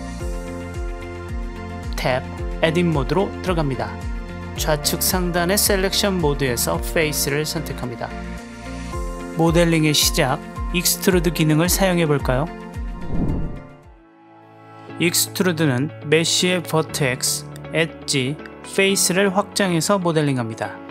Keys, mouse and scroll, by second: 1.0-1.4 middle drag, 1.4-1.9 drag, 1.9 Tab, 8.9 click, 9.4 middle click, 9.8-13.0 drag, 13.0 middle click, 13.1 click, 13.7 middle click, 14.1 click, 14.6 click, 15.1 click, 16.1 click, 16.6 click, 17.4 click, 18.8 click, 19.0 middle drag, 19.6 click, 20.4 s.